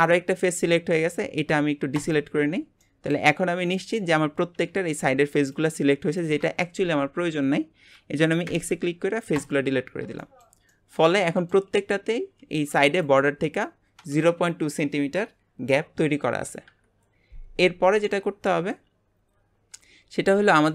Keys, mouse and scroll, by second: 0.7-1.9 scroll up 1, 1.9 shift+click, 2.5 scroll down 2, 2.8 shift+middle click, 3.4-3.7 scroll up 1, 3.7 shift+middle click, 4.1 scroll up 2, 7.5 scroll down 4, 8.4 x, 9.8-10.2 scroll down 4, 10.2-11.9 shift+middle drag, 11.9-15.0 scroll up 1, 16.6 KP_1, 17.6 scroll down 1, 18.0-20.7 middle drag.